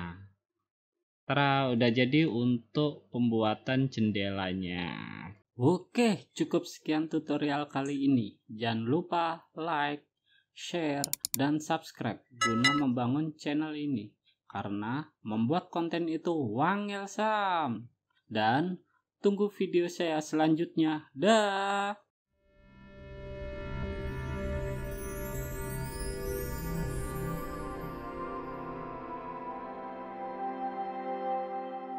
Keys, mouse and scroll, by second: 1.9 click, 3.4 click, 3.8-4.4 scroll down 6, 4.4-5.0 scroll up 5, 5.7 scroll down 5, 6.2 click, 7.4-8.0 scroll down 3, 8.0-8.5 scroll up 2, 8.7-10.1 scroll up 6, 10.8-11.2 scroll up 2, 11.2 click, 11.4 click.